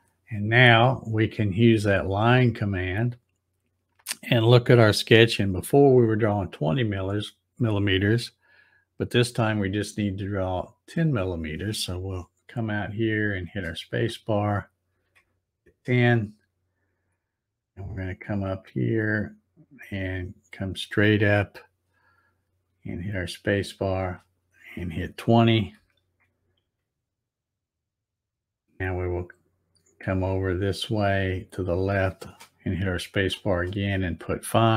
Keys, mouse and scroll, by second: 2.7 click, 10.1-13.6 drag, 13.4 space, 18.9-24.3 drag, 23.9 space, 30.0-33.2 drag, 33.1 space.